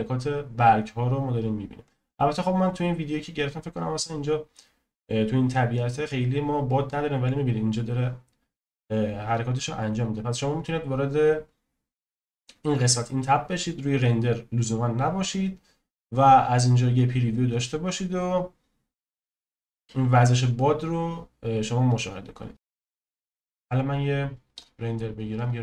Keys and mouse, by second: 24.6-25.5 drag.